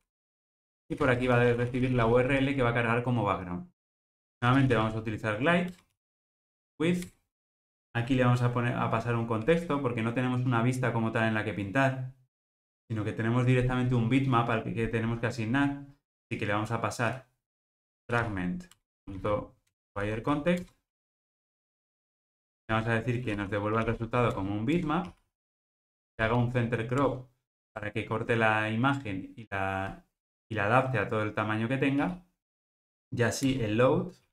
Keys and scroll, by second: 4.1 ctrl+alt+o, 18.8 Return, 24.4 Return, 33.6 Return.